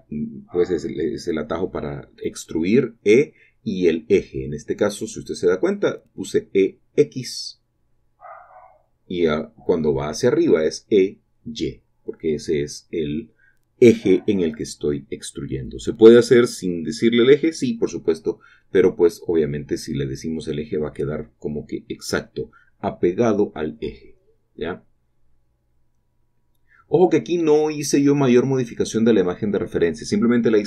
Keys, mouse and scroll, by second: 0.6 click, 0.8-1.7 scroll up 2, 1.7-2.3 scroll down 4, 2.7 typing, 4.2-4.8 typing, 4.3 click, 4.6 shift+click, 6.7 shift+click, 7.3-7.6 scroll down 1, 7.6 typing, 8.1 click, 9.1 typing, 10.2 typing, 11.3 typing, 12.9 shift+click, 12.9-13.7 typing, 14.6 shift+click, 15.0-16.8 typing, 16.5 shift+click, 17.9 shift+click, 17.9-18.9 typing, 19.9 shift+click, 20.4 typing, 21.6 shift+click, 22.5 typing, 24.0 shift+click, 24.9 typing, 26.0 shift+click, 27.3-28.1 typing, 28.3 shift+click, 28.8 shift+click, 29.5 Escape, 29.5-29.8 typing, 30.3 click.